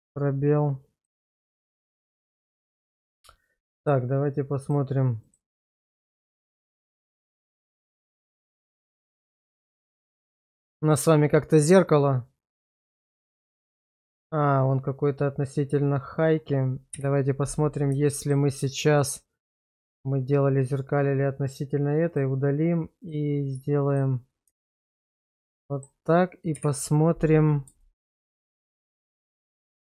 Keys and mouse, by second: 1.0-2.0 middle drag, 4.6 click, 5.2 click, 5.7 click, 6.3 click, 6.8 click, 9.4 click, 10.2 click, 11.6 click, 16.9 /, 18.1 middle click, 19.0 middle click, 19.7 middle drag, 24.6 shift+middle drag, 25.7 middle click, 27.8 shift+middle click, 28.3 middle drag, 28.8 shift+middle drag.